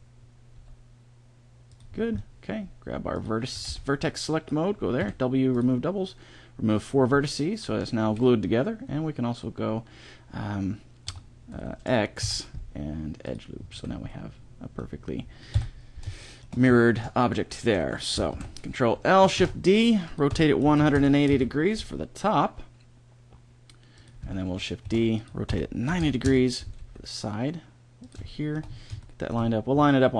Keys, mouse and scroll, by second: 0.4 g, 1.8 middle click, 3.0-4.6 drag, 3.2 a, 3.5 b, 4.8 w, 8.4-10.9 middle drag, 10.9 w, 12.0 x, 13.6 a, 15.4 KP_1, 18.2 ctrl+l, 19.2 shift+d, 20.1 r, 21.6 g, 24.7 shift+d, 25.3 r, 26.6 g, 30.0 g.